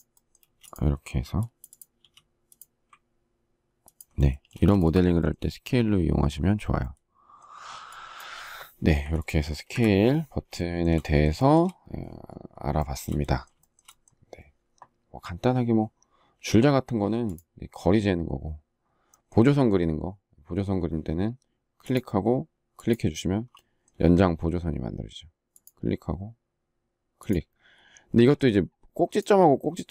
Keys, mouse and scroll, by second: 2.2 s, 3.1 ctrl+click, 3.8 space, 4.6 shift+middle click, 8.3 Delete, 10.8 shift+middle click, 12.2 shift+middle click, 12.9 shift+middle click.